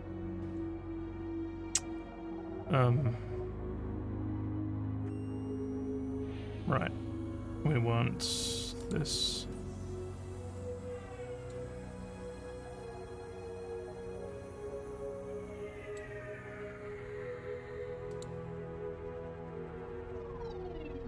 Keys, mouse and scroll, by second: 8.8 click, 11.4 click, 15.8 middle click, 18.1 click.